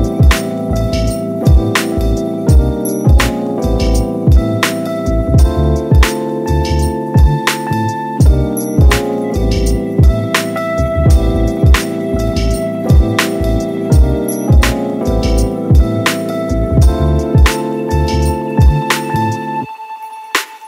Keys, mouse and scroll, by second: 1.0 shift+d, 3.9 ctrl+z, 4.4-4.9 middle drag, 4.9 click, 5.3-7.7 middle drag, 7.7 g, 12.9-13.8 middle drag, 13.8 z, 14.4-16.9 middle drag, 16.9 Tab, 17.1-18.7 right drag, 18.7-20.6 drag.